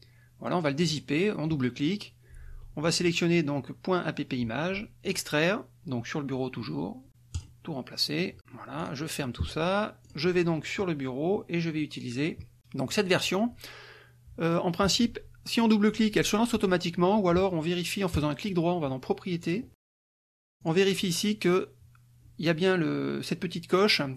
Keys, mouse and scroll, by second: 0.8 click, 2.8-3.4 drag, 5.0 click, 7.3 click, 8.8 click, 10.0 click, 12.9-17.7 drag, 18.1 click, 19.4 click, 20.6 click.